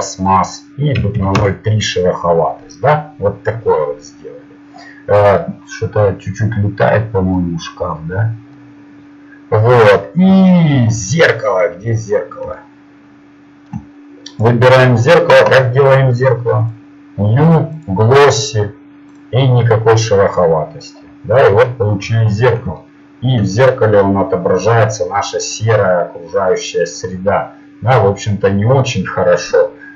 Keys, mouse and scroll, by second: 13.2 middle click, 14.3-16.7 right drag, 16.7 click, 19.5-21.6 drag.